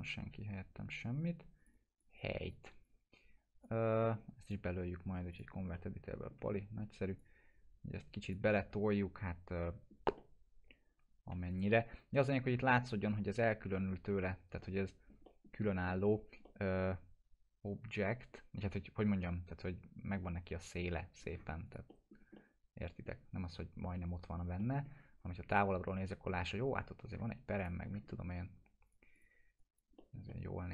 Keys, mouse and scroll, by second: 1.6 click, 2.8-3.8 click, 4.0 alt+middle click, 4.4 right click, 5.3 click, 5.8-6.3 alt+middle drag, 7.5-8.4 click, 8.8-10.1 alt+middle drag, 10.5-11.4 alt+middle drag, 11.5 click, 11.7 scroll down 1, 11.8 F4, 12.5-13.0 scroll down 1, 14.6-15.2 alt+middle click, 16.1 scroll down 1, 16.4-17.0 alt+middle drag, 18.3-18.9 scroll up 1, 21.2 scroll up 1, 21.6 click, 21.9 middle click, 22.2 scroll down 1, 22.3-23.3 alt+middle drag, 24.8 scroll down 1, 25.5 click, 25.9 scroll up 1, 27.6 click, 27.8 scroll up 1, 28.1 alt+middle click, 28.8 click, 30.0 middle click, 30.3-30.7 alt+middle drag.